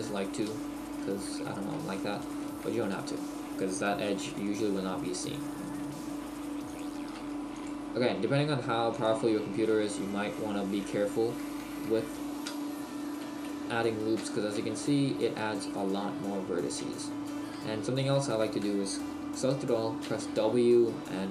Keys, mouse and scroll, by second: 0.5 Tab, 1.9-2.5 shift+scroll down 1, 2.5 shift+middle click, 3.0 Tab, 4.2 ctrl+r, 6.8 click, 7.1 ctrl+r, 9.1 Tab, 9.1 click, 9.6 middle click, 11.2 middle click, 12.0 shift+middle click, 12.5 Tab, 14.3 shift+middle click, 14.8-15.9 scroll down 1, 16.4-16.8 scroll up 6, 16.8 scroll down 3, 17.0 shift+middle click, 17.7-18.3 scroll down 1, 18.3 a, 20.1 w.